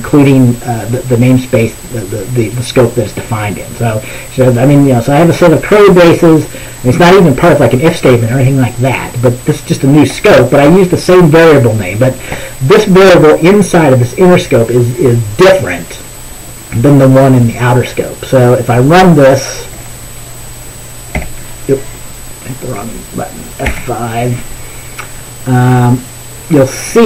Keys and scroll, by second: 21.3 F4, 23.7 F5.